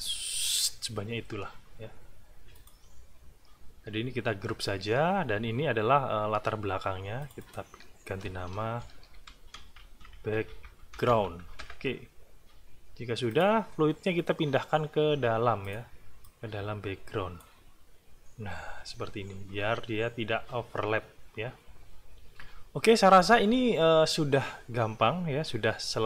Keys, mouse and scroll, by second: 2.6 click, 7.2 click, 8.6-11.5 typing, 11.6 Return, 13.3 click, 15.6 click, 16.2-17.6 drag.